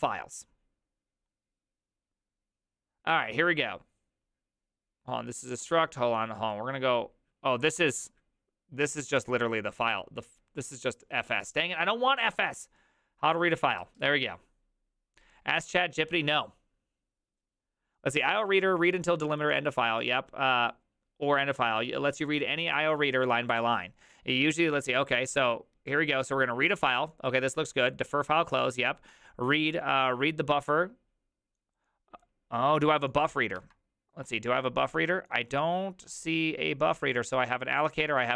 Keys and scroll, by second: 33.7 alt+{.